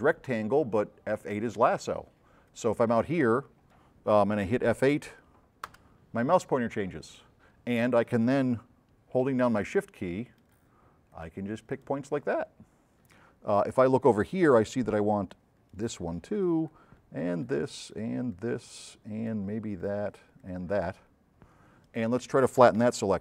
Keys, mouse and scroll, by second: 2.5 click, 5.8 F8, 9.9-10.7 shift+drag, 11.3-11.9 shift+drag, 13.4 shift+middle click, 15.2-16.0 shift+drag, 16.8-17.6 shift+drag, 18.1-18.5 shift+drag, 19.3-19.9 shift+drag, 20.5-20.9 shift+drag, 22.7 shift+middle click.